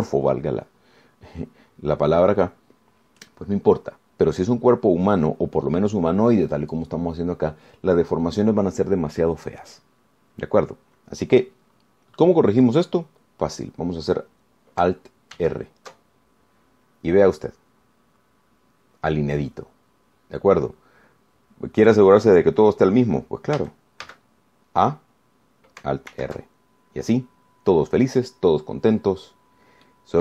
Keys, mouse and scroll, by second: 2.6-2.9 scroll down 2, 3.3-3.6 scroll up 2, 3.9-4.2 scroll down 2, 6.1-6.5 scroll up 2, 6.6 scroll down 2, 16.6 alt+r, 24.8 a, 27.3 alt+r.